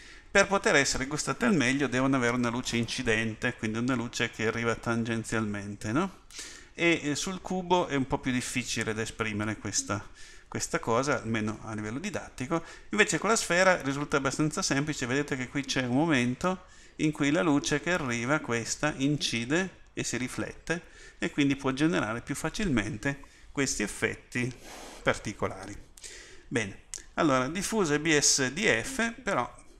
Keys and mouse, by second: 20.5 middle click.